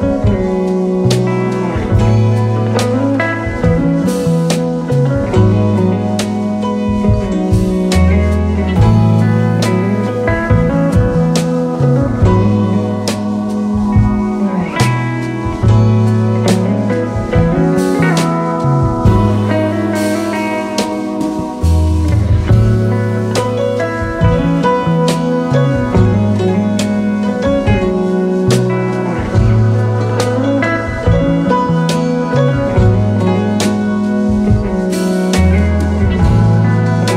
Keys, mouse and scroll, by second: 0.0-0.7 typing, 6.6 double click, 11.9-12.6 typing, 15.8-16.5 typing, 19.2 double click, 20.2 double click, 26.2-26.7 typing, 26.7 Return, 31.0 typing, 34.2 typing, 34.8 alt+scroll down 2, 36.5 alt+scroll up 2.